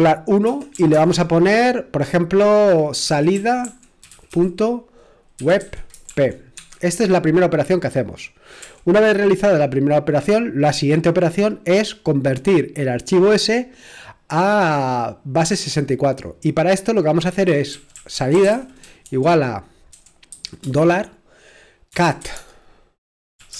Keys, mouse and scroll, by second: 0.0-0.9 typing, 2.7-6.6 typing, 17.4-20.3 typing, 21.6-23.5 typing.